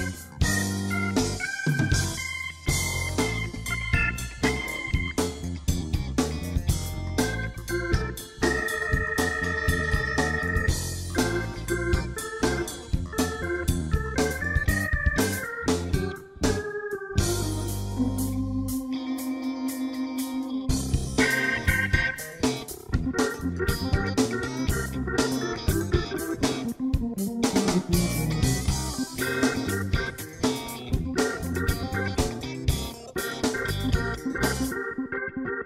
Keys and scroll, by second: 0.0-0.1 typing, 1.1-2.6 typing.